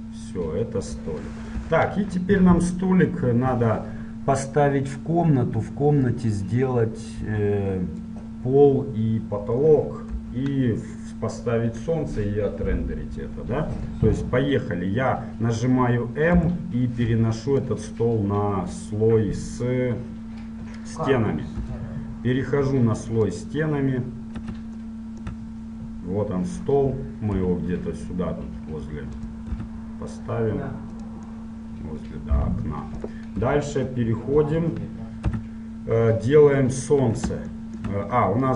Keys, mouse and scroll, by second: 1.8 KP_1, 4.2-5.2 middle drag, 5.2-7.1 drag, 8.7-17.7 middle drag, 10.3 KP_1, 17.7 m, 22.0 KP_7, 23.4-25.1 drag, 25.1-27.6 middle drag, 27.6 g, 27.8 middle click, 27.9 middle click, 29.8 r, 31.6-32.6 middle drag, 33.6 KP_1, 34.5 KP_3, 35.5 z.